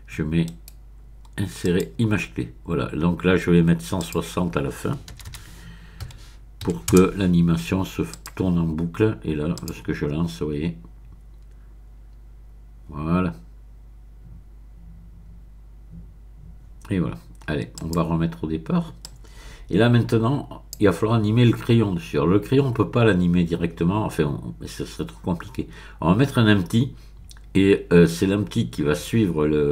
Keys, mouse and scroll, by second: 1.0-1.6 scroll up 1, 1.6 click, 4.0 click, 4.3 middle click, 5.1-6.9 typing, 8.1 click, 9.5 click, 17.7 click, 19.0-23.5 drag.